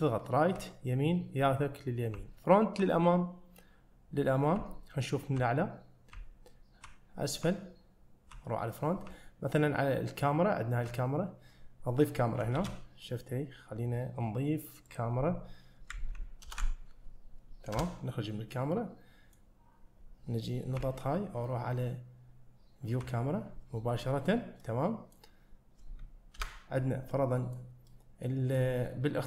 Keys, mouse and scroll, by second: 2.2 `, 6.2 `, 7.5 `, 12.2 scroll down 1, 12.6 shift+a, 16.5 ctrl+alt+KP_0, 17.8 KP_0, 18.6-19.4 middle drag, 19.9-20.4 scroll down 2, 24.4-24.7 scroll down 1, 24.7-25.2 middle drag, 25.5 scroll down 1, 26.4 KP_0, 27.2-27.6 middle drag, 27.9-28.6 middle drag.